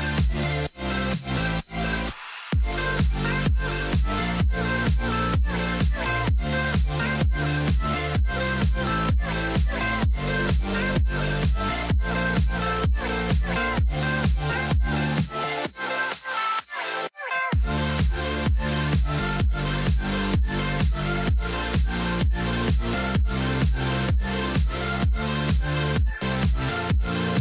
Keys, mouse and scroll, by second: 0.3 right click, 0.7 middle click, 3.1 middle click, 3.3 right click, 4.1-4.7 scroll down 1, 6.1 scroll down 1, 10.3 middle click, 10.8 middle click, 10.8 right click, 12.0 middle click, 13.5 right click, 13.7-14.7 scroll down 1, 14.9 middle click, 18.0 middle click, 18.1 right click, 18.5-21.9 scroll down 1.